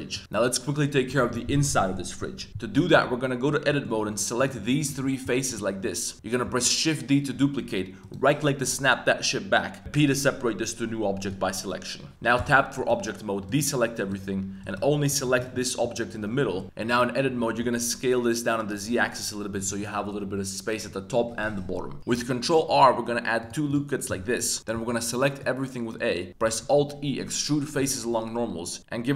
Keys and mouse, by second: 0.1-2.9 shift+drag, 2.9 Tab, 3.6 middle click, 4.0 3, 4.3 click, 4.7 shift+click, 5.0 middle click, 5.4 shift+click, 5.8 middle click, 6.4 shift+d, 9.8 p, 12.3 Tab, 13.5 click, 14.0 click, 14.6 click, 15.1 click, 15.4 click, 15.8-17.6 typing, 16.6 click, 16.6 Tab, 19.5 click, 22.1 super+r, 23.7 click, 24.1 middle click, 24.6 a, 24.7 a, 25.1 middle click, 26.6 alt+e.